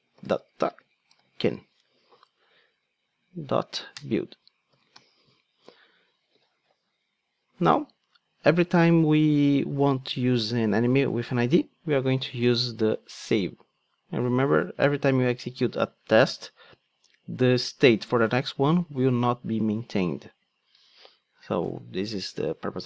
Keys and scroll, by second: 3.9 Return, 4.9 alt+super+l, 21.4 Tab.